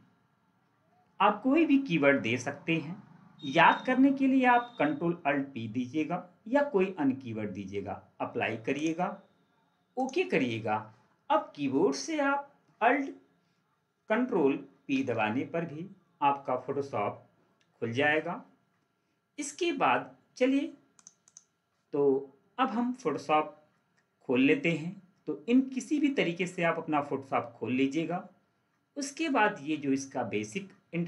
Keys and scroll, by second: 14.6 ctrl+alt+p.